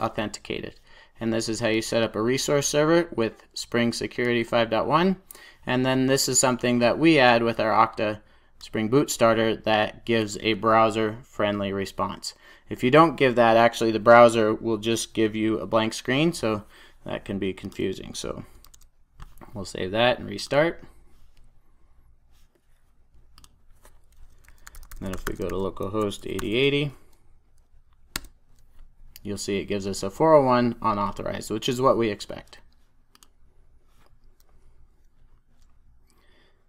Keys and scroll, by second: 18.5 super+s, 20.3 ctrl+r.